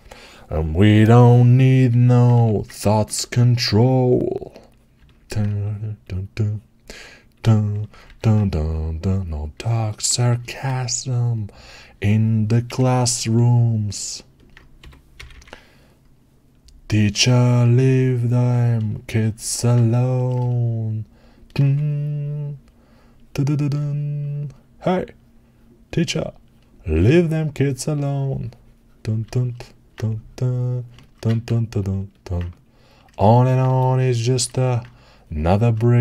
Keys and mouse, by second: 2.2 3, 3.2-4.8 alt+drag, 4.8-9.4 alt+right drag, 7.9 1, 14.6-18.6 drag, 14.6 g, 15.2 g.